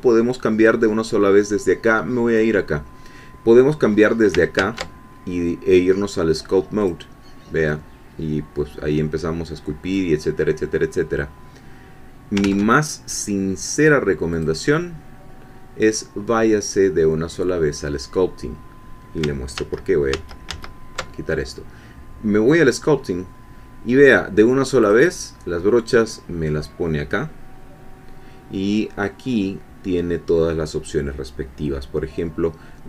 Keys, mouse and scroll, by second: 2.3 click, 3.8-4.3 scroll up 1, 4.6 ctrl+Tab, 6.8 click, 7.7-10.1 drag, 12.4 ctrl+Tab, 14.3 click, 19.6 ctrl+z, 24.9 click.